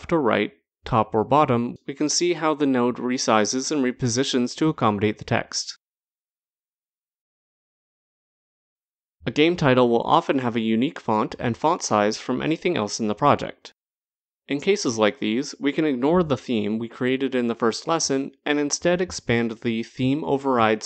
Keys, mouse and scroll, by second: 0.2 click, 1.4 click, 2.3 click, 3.3 click, 4.4 click, 5.4 click, 9.0 click, 10.1 click, 11.5-11.9 scroll, 11.9-13.8 scroll down 3, 14.1-14.9 scroll, 14.9-15.3 scroll down 3, 15.5 scroll.